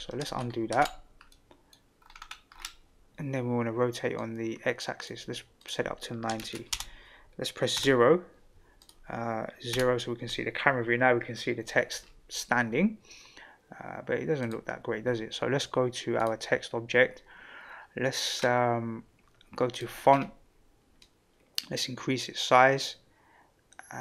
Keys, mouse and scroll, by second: 0.7 ctrl+z, 1.3-1.7 middle drag, 1.9-2.6 scroll up 6, 4.1-5.2 drag, 5.6-8.3 drag, 7.7 KP_0, 8.8 click, 9.7 KP_0, 14.4 click, 16.2 click, 18.4-19.5 scroll down 1, 19.7 click, 20.1 scroll down 2, 21.0-24.0 drag.